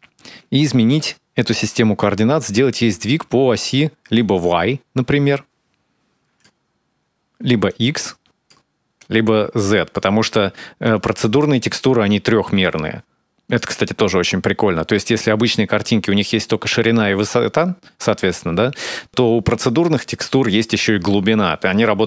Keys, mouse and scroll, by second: 2.5 click, 7.5 click, 8.8 click, 10.7 click, 19.1 click.